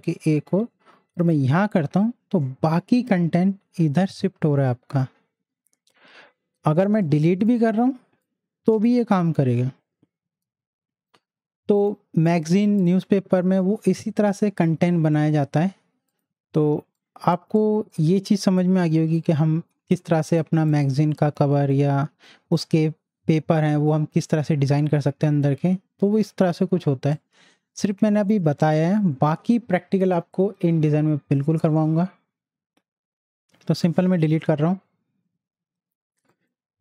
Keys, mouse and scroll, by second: 1.5 ctrl+v, 3.2-4.3 scroll up 1, 4.3-5.7 scroll down 1, 5.7-7.0 scroll up 1, 7.0-10.4 drag, 11.7 click, 12.6 z, 12.8-15.6 drag, 16.1-17.5 drag, 17.5 space, 17.6-20.3 drag, 27.1-36.3 drag, 36.3 right click.